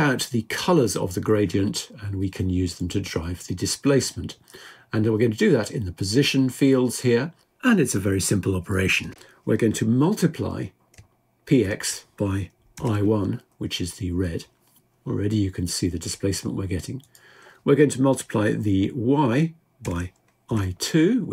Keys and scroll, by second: 11.3 typing, 17.6 typing.